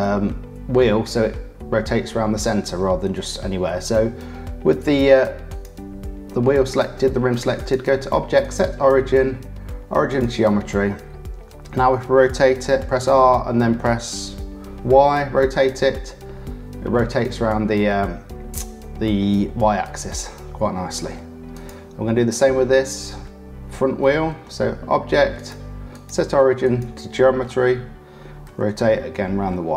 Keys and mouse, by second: 4.7 click, 5.4 click, 7.5-10.5 drag, 11.3 r, 21.5 click, 24.0 click, 25.3-26.9 drag, 28.4 r.